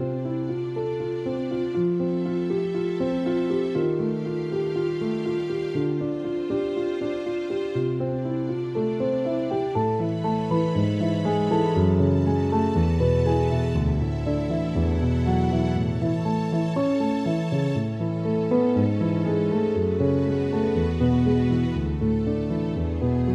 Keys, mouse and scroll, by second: 0.4 ctrl+-, 1.7 ctrl+=, 3.5 click, 9.8 click, 14.3 click, 15.0 space, 15.3 click, 15.3 space, 16.0 F7, 17.1 =, 17.8 ctrl+=, 18.8 click, 19.8 ctrl+click, 20.9 ctrl+e, 21.8 click, 22.6-23.3 typing.